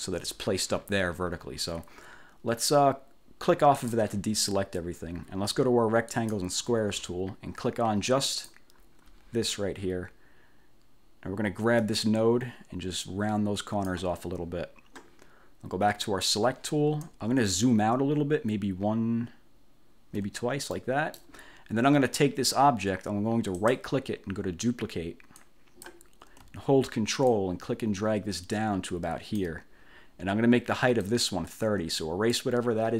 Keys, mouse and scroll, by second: 3.9 click, 6.2 click, 8.3 click, 11.9-14.2 drag, 16.1 click, 18.6 ctrl+scroll down 2, 20.0 ctrl+scroll down 2, 20.8 click, 23.7 right click, 25.5 click, 27.5-29.7 ctrl+drag, 31.2-32.7 drag.